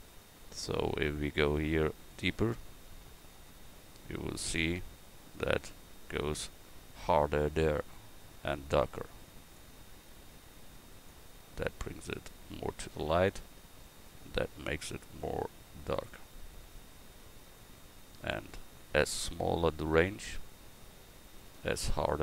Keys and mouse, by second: 2.5-10.0 drag.